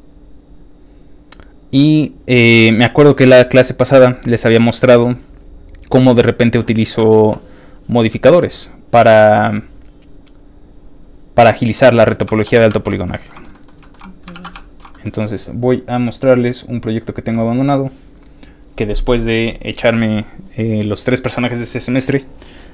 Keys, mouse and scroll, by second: 0.5-3.3 scroll down 7, 4.0-4.8 scroll down 2, 6.0 click, 7.9 click, 9.5 click, 10.1 click, 10.8 click, 12.1 middle click, 12.1 scroll down 1, 12.3 shift+middle click, 12.7 ctrl+shift+Tab, 13.0 ctrl+shift+middle click, 13.3 ctrl+shift+middle click, 13.5 middle click, 13.8 shift+middle click, 14.0 shift+middle click, 14.0 scroll up 1, 14.3 ctrl+s, 14.5 shift+middle click, 14.9 middle click, 15.8 middle click, 15.9 click, 16.8 click, 17.6 click.